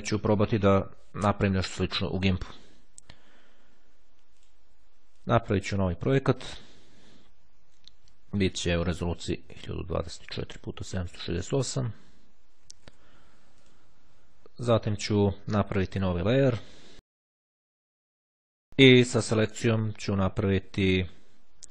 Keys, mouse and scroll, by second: 4.0-5.2 drag, 5.4 click, 6.7 click, 8.7 click, 9.5 KP_1, 9.6 KP_0, 9.7 KP_2, 9.9 KP_4, 11.2 click, 12.7 KP_7, 12.9 KP_6, 13.1 KP_8, 13.8 click, 16.6 click, 18.1 click, 21.1 click.